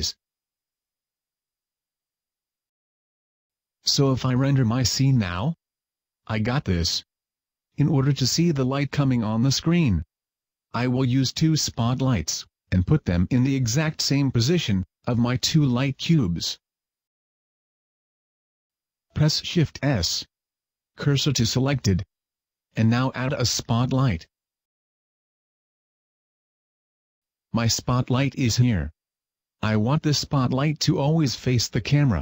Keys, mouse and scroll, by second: 2.1 click, 2.5 click, 5.7-7.7 scroll down 2, 6.1 Tab, 11.9 Escape, 12.9-13.9 scroll up 1, 19.6 shift+s, 22.4 shift+a, 28.4 click.